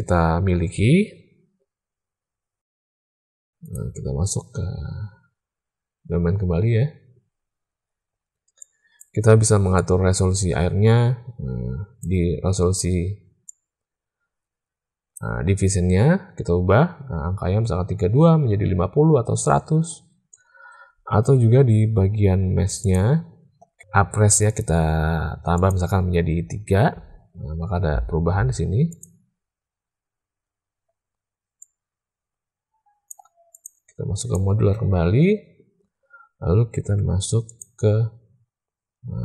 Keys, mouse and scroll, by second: 2.4 space, 3.5 click, 8.6 click, 9.8-12.0 drag, 13.5-15.1 drag, 25.5 click, 29.4 click, 31.6-33.1 drag, 33.5-34.4 drag, 37.5-39.2 drag.